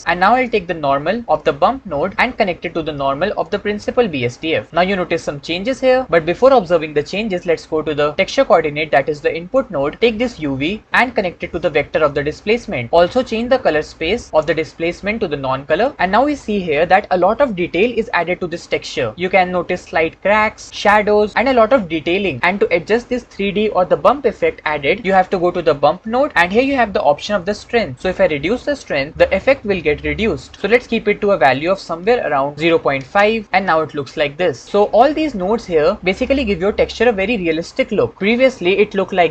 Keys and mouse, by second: 0.6-2.2 shift+drag, 2.4-4.6 drag, 8.4 click, 11.0 click, 11.2-12.9 drag, 14.2-15.9 drag, 25.5 shift+click, 27.9-29.2 drag, 32.0 click.